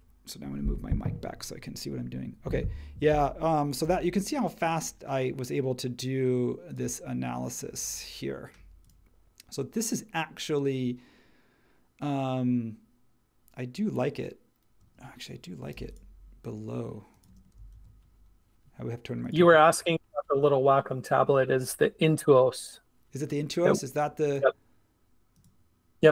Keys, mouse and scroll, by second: 3.8 m, 14.8 space, 15.7 m, 17.3 space, 17.7 super+1.